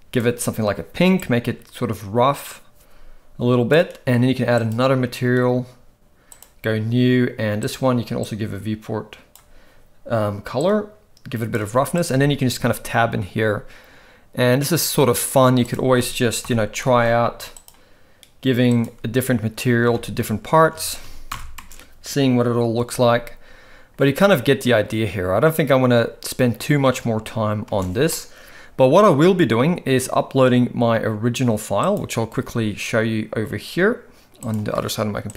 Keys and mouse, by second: 1.2-3.7 drag, 4.6 click, 7.6 click, 10.6 click, 12.0 click, 12.1 Tab, 16.4 ctrl+l, 17.5 click, 18.7 click, 20.3 Tab, 20.7 alt+a, 21.3 shift+Left, 21.6 space, 27.7 space, 28.1-29.1 middle drag.